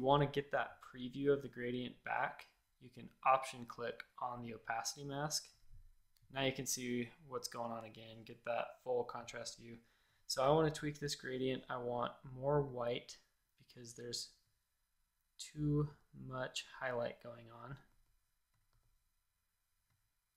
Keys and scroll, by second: 8.0 space, 8.5 space, 8.6 space, 10.4 g, 17.8 a, 18.6 g.